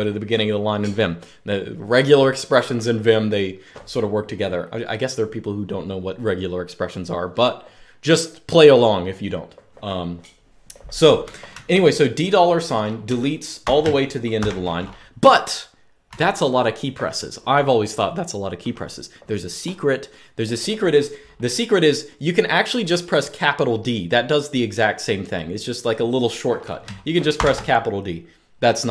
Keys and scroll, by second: 11.2-14.6 typing, 15.8 typing, 27.1 shift+d.